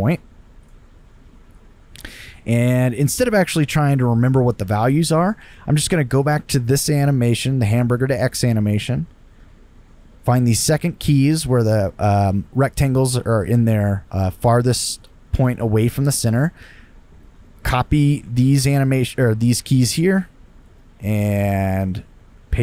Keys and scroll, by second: 18.6 super+c.